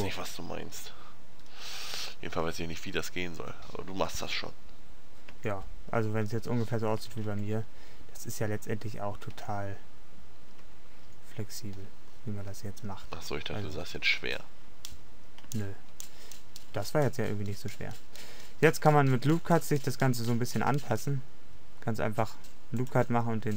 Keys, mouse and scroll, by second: 5.4 Tab, 7.3 Tab, 9.4 Tab, 10.7 Tab, 11.9-13.5 middle drag, 15.7 Tab, 21.0 ctrl+r.